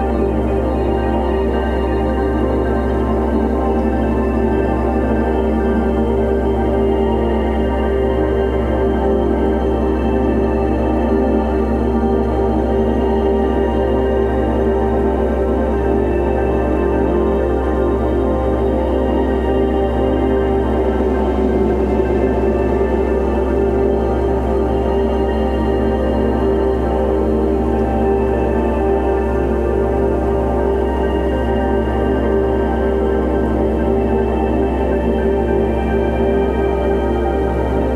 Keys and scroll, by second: 0.0-0.9 typing, 1.7 alt+super+z, 1.8 alt+super+2, 2.0 ], 2.3 [, 3.0 ], 3.5 x, 5.1-7.4 typing, 8.8 space, 10.2 space, 10.7 space, 11.3 x, 12.2 v, 21.1 super+g, 23.9 m, 27.0 super+c, 27.8 super+w, 28.1 super+v, 32.4 super+t, 33.0 alt+super+t.